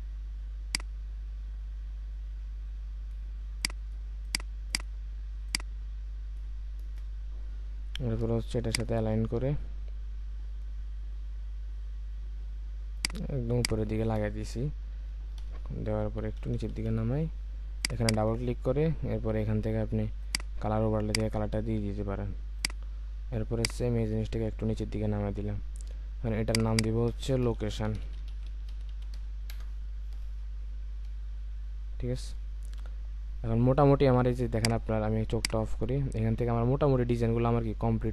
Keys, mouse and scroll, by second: 4.7 double click, 6.8 Return, 8.7 ctrl+click, 15.4 ctrl+d, 16.4 Down, 18.0 double click, 26.7 double click, 27.9-29.1 typing, 29.5 Return, 31.3 alt+scroll down 1.